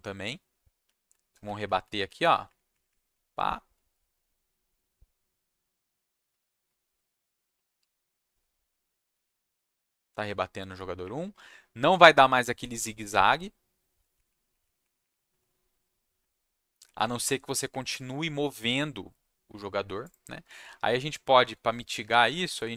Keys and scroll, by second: 1.1 Down, 1.4 Down, 1.6 Down, 1.8 Down, 2.0 Down, 2.4 Up, 2.7 Up, 2.9 Up, 3.7-9.1 typing, 10.3 w, 11.0 Up, 11.8 Up, 12.4 Down, 12.8 Up, 13.4 Down, 14.1 Up, 14.4 Up, 14.6 Up, 14.8 Up, 15.0 Up, 15.3 Down, 16.1 Down, 17.1 Up, 17.9 Down.